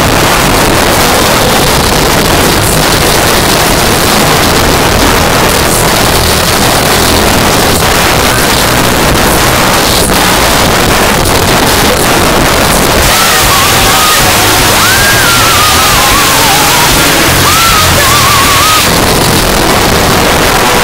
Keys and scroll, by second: 1.6 Down, 1.8 Down, 1.9 Down, 18.8 Page_Down.